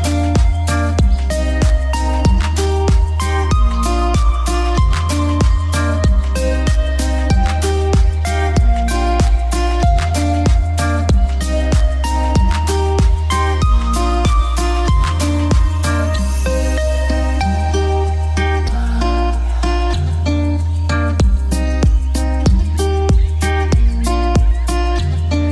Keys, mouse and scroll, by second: 1.1 shift+click, 1.2-2.1 typing, 2.2 click, 2.4 F2, 2.5 click, 3.8 click, 5.4 F3, 6.6 click, 9.8 F2, 10.0-12.3 drag, 12.3 right click, 12.9 click, 16.1 alt+c, 16.4 w, 17.2 click, 20.0 alt+c, 20.2 w, 21.3 click, 22.4 right click, 23.0-25.5 drag.